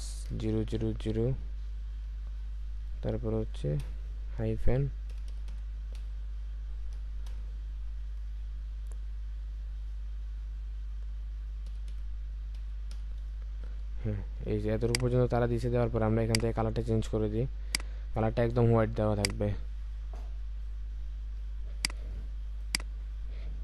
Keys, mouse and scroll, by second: 0.0-0.6 typing, 3.8 typing, 5.1-6.0 typing, 7.3 typing, 11.7-12.9 typing.